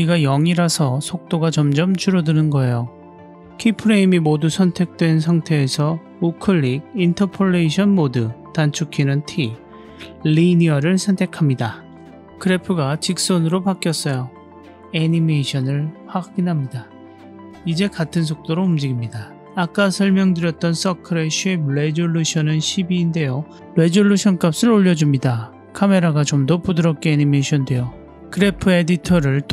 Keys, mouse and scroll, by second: 16.5 click, 18.6 scroll down 1, 20.5 middle click, 20.7-21.3 scroll down 1, 21.3 click, 22.3-24.3 drag, 24.9-28.2 drag, 28.2 middle click, 28.5-29.3 scroll down 2, 29.3 click.